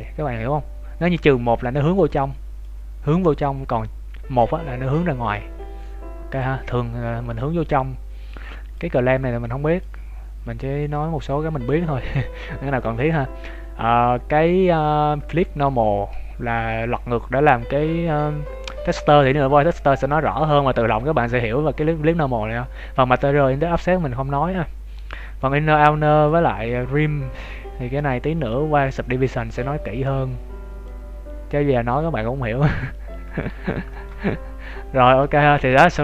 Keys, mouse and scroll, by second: 1.4 click, 8.7 click, 13.9 scroll down 1, 14.8 shift+middle click, 14.8-15.2 scroll down 1, 19.4-20.0 scroll up 1, 20.0 shift+middle click, 25.7 click, 33.1 scroll up 2, 33.4 scroll down 2, 33.8 shift+middle click, 34.2 middle click.